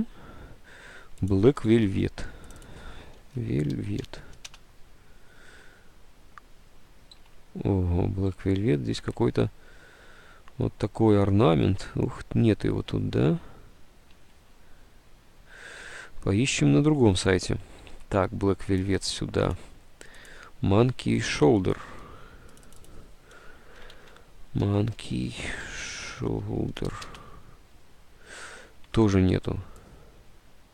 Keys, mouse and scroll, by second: 1.9 alt+Tab, 3.1-4.3 typing, 7.3 alt+Tab, 8.3 alt+Tab, 8.4 Return, 9.2 alt+Tab, 11.9 alt+Tab, 14.4 alt+Tab, 18.0 alt+Tab, 19.1-20.1 drag, 21.8 alt+Tab, 23.6-26.3 typing, 28.9 Tab.